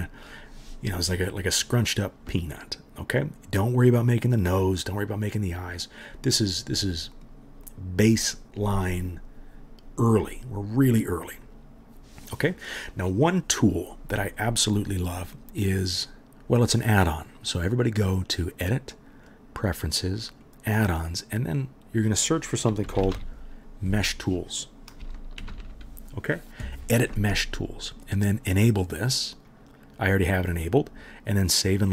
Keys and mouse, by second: 18.2-31.9 middle drag, 23.0-31.9 drag, 23.0-31.9 right drag.